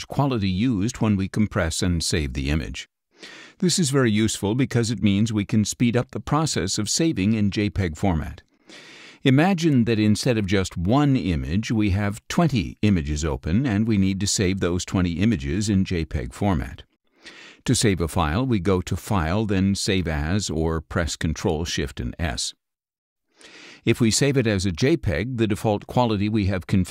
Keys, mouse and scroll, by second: 1.8-2.8 middle drag, 9.2 click, 9.3 middle click, 10.5 middle click, 13.6 click, 13.7-15.3 middle drag, 19.0-19.3 scroll up 1, 21.2 click, 23.5 click, 25.1 click, 26.5 click.